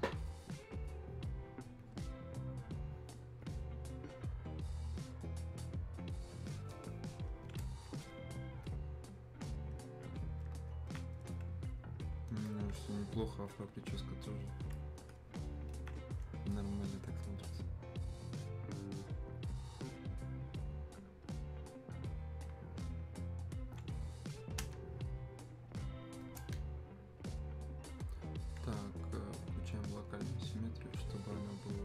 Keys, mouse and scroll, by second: 8.1 click, 11.0 alt+click, 13.6 click, 15.8 alt+click, 20.4 click, 31.3 click.